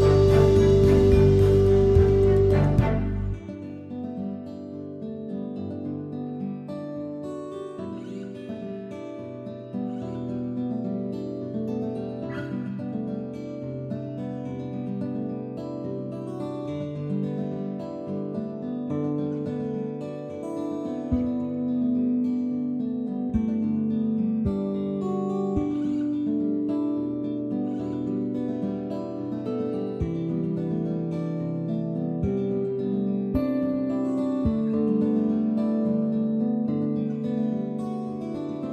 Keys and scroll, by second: 38.0 space.